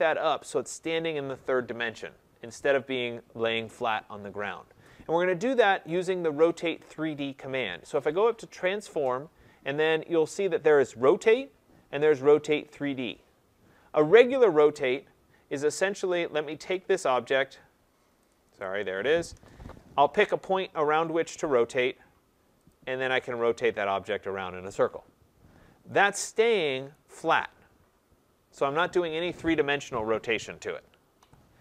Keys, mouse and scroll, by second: 1.0-1.7 scroll, 5.9 right click, 8.8 click, 14.7 click, 16.7 right click, 17.4 click, 18.6 click, 19.3 Return, 21.8 click, 22.7 click, 26.9 right click, 31.2 Escape.